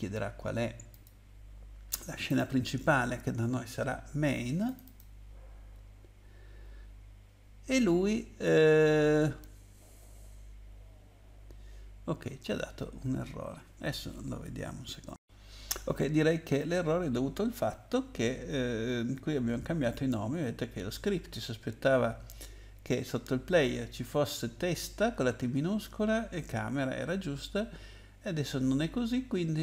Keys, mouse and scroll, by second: 0.9 click, 2.3 click, 4.6 click, 4.9 double click, 12.5-13.7 scroll up 2.